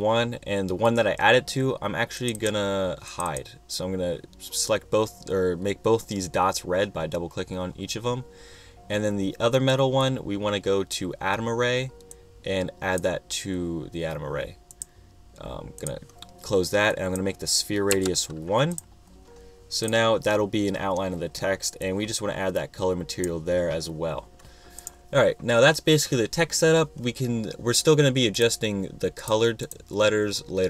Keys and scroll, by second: 18.2 |.